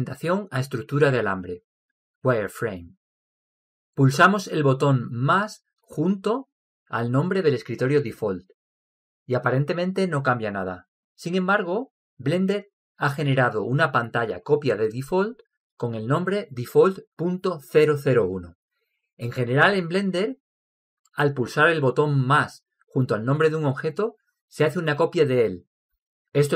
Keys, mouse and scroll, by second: 3.5-5.2 middle drag, 9.7-11.5 drag, 14.2-15.0 drag, 15.2 click.